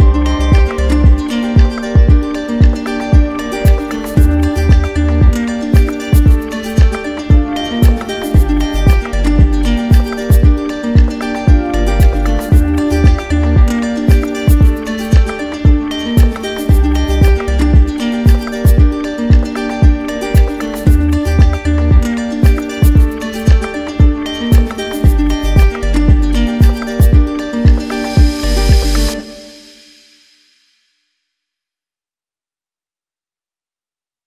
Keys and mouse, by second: 2.5 z, 3.3 click, 6.0 alt+click, 6.9 ctrl+z, 8.7 right click, 11.4 z, 13.4-14.5 drag, 15.9 click, 17.8 click, 23.2-24.3 drag, 25.4-26.5 drag, 26.6-27.7 drag, 28.1 click, 28.8 ctrl+z, 30.1 click, 30.9 click, 31.6 click, 32.5 click, 33.7 click.